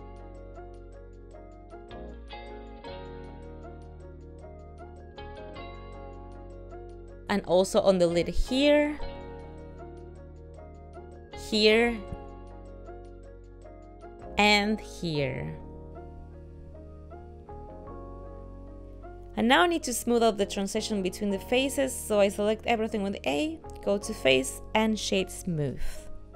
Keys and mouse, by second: 1.6 ctrl+r, 4.4 middle click, 4.9 ctrl+middle click, 5.9 middle click, 6.5 shift+middle click, 8.0 ctrl+r, 11.2 ctrl+r, 14.6 ctrl+r, 19.4 ctrl+middle click, 21.3 shift+middle click, 21.6 ctrl+middle click, 22.2 a, 24.6 click.